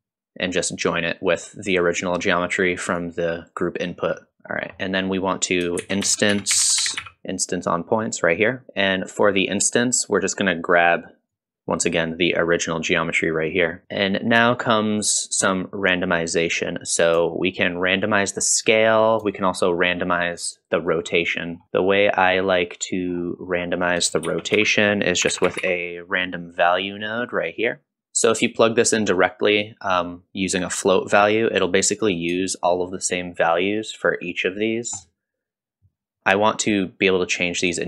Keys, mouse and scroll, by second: 0.9-3.0 drag, 4.5 click, 4.5 scroll down 2, 4.8 middle click, 5.8 shift+a, 11.3-13.8 drag, 13.8 middle click, 13.8-14.4 scroll down 1, 14.4-15.5 middle drag, 17.3-18.7 shift+drag, 19.3-20.9 shift+drag, 21.5 scroll up 1, 21.6 click, 21.6 middle click, 21.6-22.0 scroll down 2, 22.4-23.0 drag, 23.4 middle click, 23.4 scroll up 1, 24.6 shift+a, 28.0 shift+click, 31.7-32.1 drag, 32.5-36.2 shift+drag.